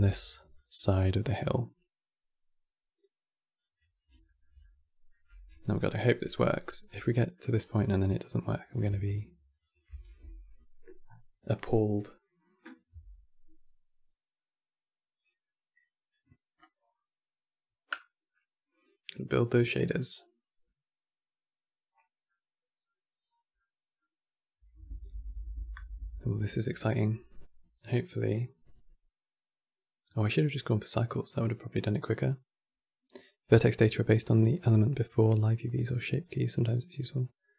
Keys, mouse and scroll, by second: 0.3-3.2 drag, 3.6-3.9 scroll down 2, 3.9-5.2 shift+middle drag, 5.2 n, 6.0 shift+middle click, 6.6 scroll down 3, 6.8 middle click, 7.3 scroll down 3, 7.5-9.7 middle drag, 9.7 ctrl+shift+click, 22.0-22.9 middle drag, 22.9-23.2 scroll down 4, 23.2-26.3 middle drag.